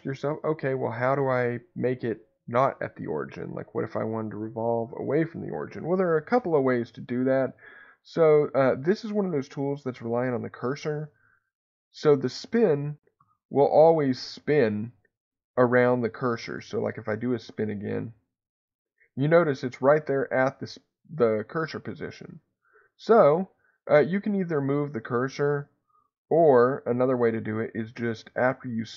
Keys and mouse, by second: 11.2 ctrl+z, 12.2 ctrl+z, 13.1 ctrl+z, 18.0-22.7 drag, 27.9-28.9 drag.